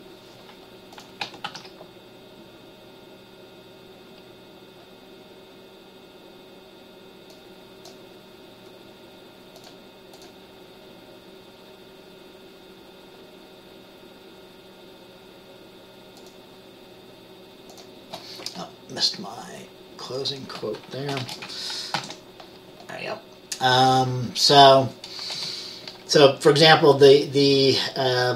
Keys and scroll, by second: 1.5 ctrl+s, 21.5 ", 22.1 ctrl+s, 25.5 Return.